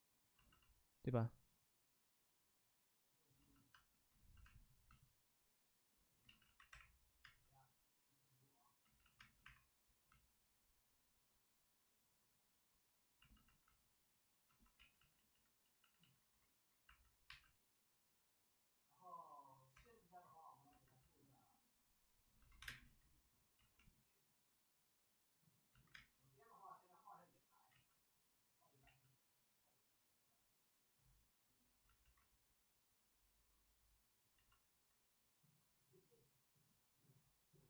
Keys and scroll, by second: 3.0 ctrl+z, 3.7 space, 4.4 space, 6.2 ctrl+z, 6.4 ctrl+z, 6.6 2, 7.2 space, 8.8 ctrl+z, 9.2 space, 9.4 1, 14.7 ctrl+z, 14.9 ctrl+z, 15.3 ctrl+z, 15.5 ctrl+z, 17.2 1, 19.7 2, 22.5 1, 22.6 space, 23.5 ctrl+z, 25.7 ctrl+z, 25.9 space, 27.6 ctrl+z, 28.8 ctrl+z, 31.8 ctrl+z, 31.9 ctrl+z.